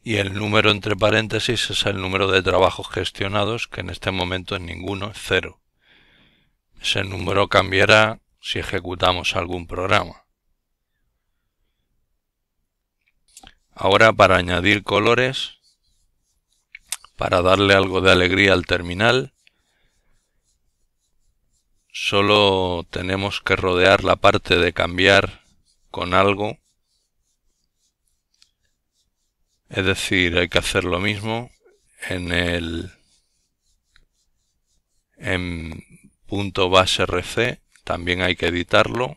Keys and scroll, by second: 9.6-10.6 typing, 11.1 Return.